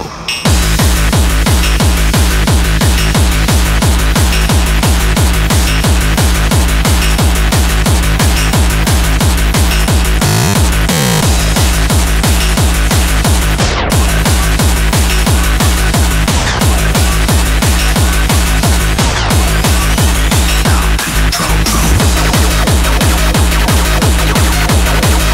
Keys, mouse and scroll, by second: 0.2 ctrl+o, 2.6-6.1 drag, 7.8-11.6 drag, 12.2-14.5 drag.